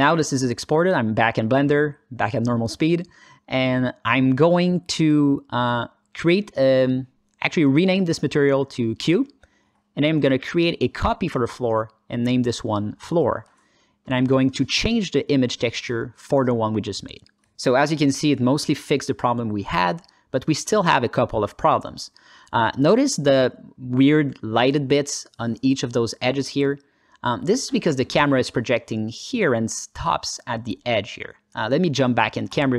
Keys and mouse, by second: 2.3-3.7 alt+middle drag, 5.2 click, 7.1 click, 8.2-9.6 shift+drag, 11.8-13.5 drag, 12.8 o, 14.0 alt+middle click, 15.0 click, 17.8 click, 18.7 click, 19.7-22.1 alt+middle drag, 22.4 ctrl+alt+middle drag, 22.8 alt+middle click, 23.2 alt+shift+middle drag, 24.4 click, 25.1 click, 25.6 click, 26.2 alt+middle click, 28.5-30.4 drag, 30.6 ctrl+z, 30.7 click, 31.8 middle click.